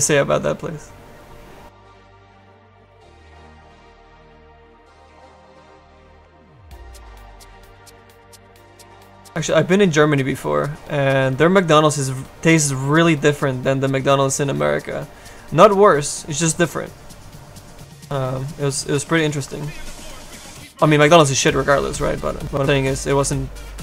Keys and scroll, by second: 22.9 s.